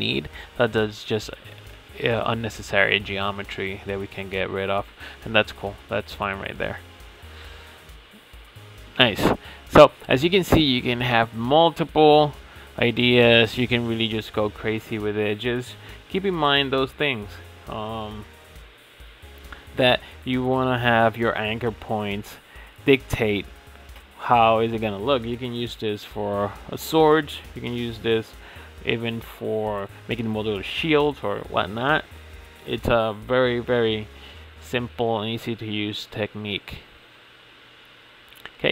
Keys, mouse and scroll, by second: 0.2 l, 0.7-2.0 scroll down 3, 2.0 click, 2.9 x, 4.2 Tab, 4.4 scroll down 4, 4.7-5.1 middle drag, 5.1 click, 5.5-6.7 middle drag, 6.7 ctrl+s, 7.5 click, 8.0-8.3 scroll down 6, 8.3 click, 8.6-10.5 middle drag, 10.5 scroll up 3, 10.8 click, 11.3 scroll up 3, 11.5 Tab, 12.0-13.8 drag, 13.9 click, 14.3 middle click, 14.9 click, 15.9 g, 17.3 Tab, 17.8 Tab, 18.2-18.5 shift+middle drag, 18.5-19.1 scroll up 7, 19.1-19.4 scroll down 3, 19.4-20.2 middle drag, 20.2 ctrl+r, 23.3 Tab, 24.2 ctrl+s, 24.8 click, 25.1-26.0 scroll down 7, 26.0 click, 27.3-27.8 drag, 28.0-28.9 drag, 29.1 scroll down 3, 29.3-30.0 shift+middle drag, 30.0 ctrl+s, 30.6 click, 31.7 click, 32.5-34.0 middle drag, 34.0 click, 34.6 Tab, 35.0-38.3 shift+middle drag, 38.3-38.7 scroll up 4.